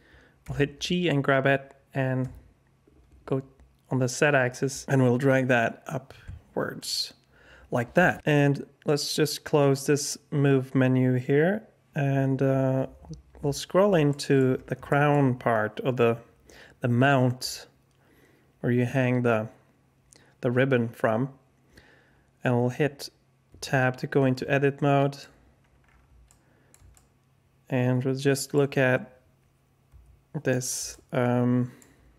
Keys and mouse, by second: 0.4 g, 8.8 click, 14.1 alt+shift+drag, 14.8 shift+drag, 23.5 Tab, 24.3 alt+click, 24.5 alt+middle click, 26.2 alt+middle click, 26.9-28.5 shift+middle drag, 29.8 KP_Decimal, 30.9 alt+click.